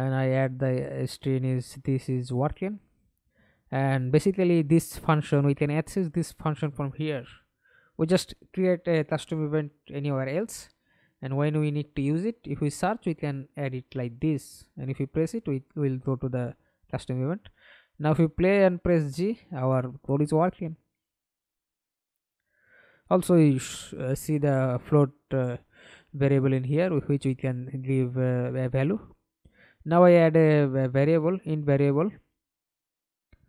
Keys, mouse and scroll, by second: 0.0-0.3 typing, 7.2-8.7 typing, 10.9 double click, 11.5 right click, 13.5 alt+p, 14.8 F11, 16.1 h, 18.6 Escape, 19.0 middle click, 19.8 F11, 22.1 right click, 24.5 Delete, 27.2-28.4 typing.